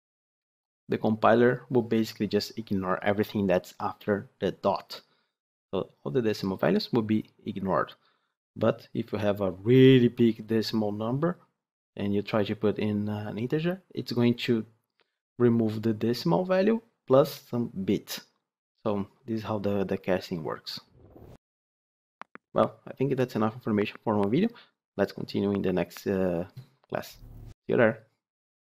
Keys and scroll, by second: 0.2 ctrl+shift+F10.